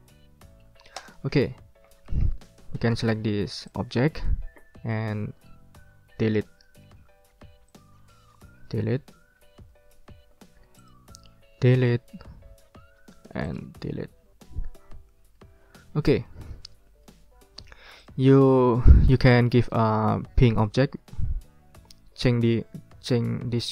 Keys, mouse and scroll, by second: 1.0 ctrl+click, 1.4-1.8 ctrl+scroll up 1, 1.9 ctrl+click, 2.2 ctrl+scroll down 1, 2.8 ctrl+scroll up 1, 3.7-5.1 drag, 5.1-5.6 ctrl+scroll down 2, 6.4 Delete, 6.6 click, 7.1 ctrl+scroll up 2, 7.7 ctrl+click, 8.5 Delete, 9.3 ctrl+scroll down 2, 9.6-10.6 ctrl+scroll up 6, 9.7 ctrl+middle click, 9.8 ctrl+click, 9.9 ctrl+middle click, 10.8 ctrl+middle click, 11.0 ctrl+click, 11.5 Delete, 12.0 middle click, 12.4 ctrl+scroll down 2, 13.1 ctrl+scroll up 2, 13.4 ctrl+click, 14.5 Delete, 15.6-16.1 ctrl+scroll down 4, 16.2 ctrl+middle click, 16.5 ctrl+click, 16.6 middle click, 16.7 ctrl+click, 17.4 ctrl+scroll up 1, 18.0 ctrl+click, 18.5 ctrl+scroll down 1, 19.3-20.8 ctrl+drag, 20.8 ctrl+z, 21.2 ctrl+scroll up 2, 21.9 ctrl+scroll up 2.